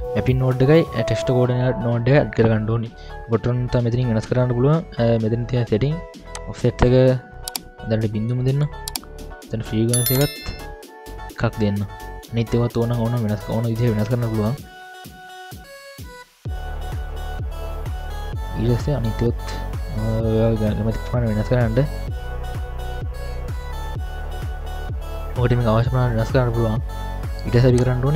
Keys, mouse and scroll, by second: 0.6-1.5 scroll up 2, 1.6-2.1 scroll down 1, 2.3-3.0 scroll down 2, 3.0 scroll up 1, 3.0 middle click, 6.3-8.7 drag, 10.1 click, 15.0-16.1 drag, 16.8-18.1 drag, 17.7 BackSpace, 19.1-19.8 scroll up 2, 19.8 middle click, 21.4-22.3 scroll up 1, 22.5 click, 24.5 scroll up 3, 24.5 middle drag, 25.5-25.8 scroll down 1, 26.2 scroll down 5, 27.0 middle click, 27.0-27.3 scroll up 1, 27.7 click.